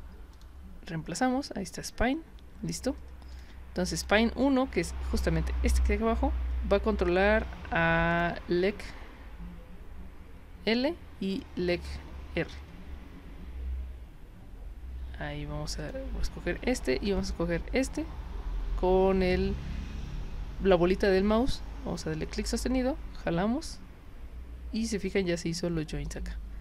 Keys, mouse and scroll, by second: 0.3 click, 3.3 click, 4.0 click, 8.1 click, 11.3 click, 15.8 click, 17.2 ctrl+click, 26.0 click.